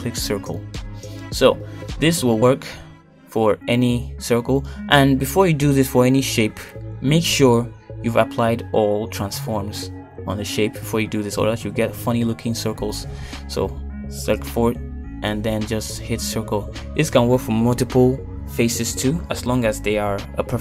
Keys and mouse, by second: 2.5 shift+middle click, 9.0 shift+click, 9.6 shift+click, 9.8 shift+click, 10.1 shift+click, 11.0 ctrl+z, 12.9-14.0 right drag, 14.7 click, 15.3 ctrl+shift+click, 16.8-18.6 right drag, 18.6 shift+middle click, 20.5 shift+middle click.